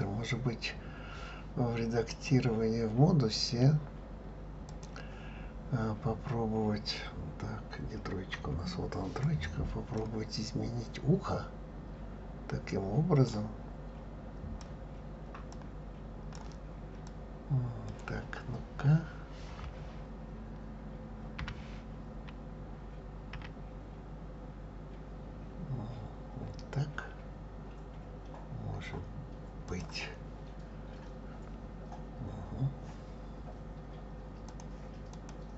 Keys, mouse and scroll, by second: 2.1-5.1 drag, 8.4 KP_3, 9.2 click, 13.2-17.1 drag, 21.4 g, 34.5 click, 35.1 click.